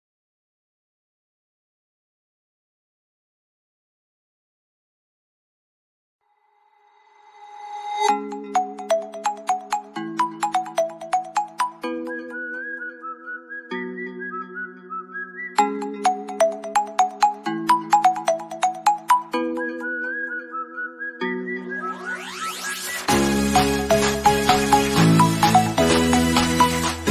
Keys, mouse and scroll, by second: 0.8-3.6 middle drag, 8.8 click, 10.0-11.6 middle drag, 11.6 click, 12.9 middle click, 13.8 scroll down 1, 19.2 scroll up 1, 21.6 scroll down 1, 21.6-25.0 middle drag, 25.0 scroll up 1, 25.9-27.1 middle drag.